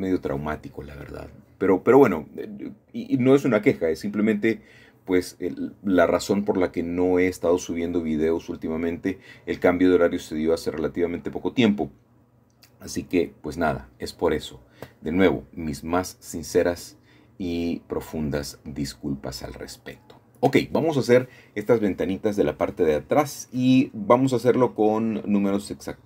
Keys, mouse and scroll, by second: 1.7 KP_3, 3.3-5.5 drag, 8.4 Escape, 9.8 Escape, 10.0 Escape, 13.3 Escape, 14.4 ctrl+z, 15.2 shift+middle click, 15.4-17.2 shift+drag, 17.2-18.9 middle drag, 21.6 i, 23.1 ., 24.8 KP_0, 25.8 KP_5.